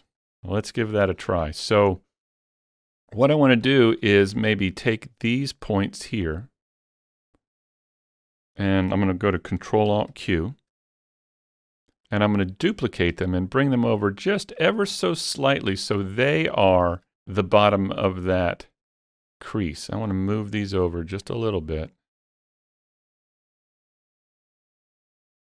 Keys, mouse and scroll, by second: 0.2 middle click, 1.0 scroll down 1, 1.2-2.0 scroll up 3, 2.0-3.7 middle drag, 3.7-5.0 shift+middle drag, 5.0 click, 6.3 shift+click, 7.0 shift+click, 7.6 shift+click, 8.3 shift+click, 9.9 ctrl+alt+q, 11.1-11.4 scroll up 1, 11.4 scroll down 1, 11.8 shift+middle click, 16.0 shift+middle click, 16.0 scroll down 1, 16.1 shift+middle click, 17.8-21.3 drag, 21.3-23.1 drag, 23.1-25.4 drag, 24.6 shift+middle click.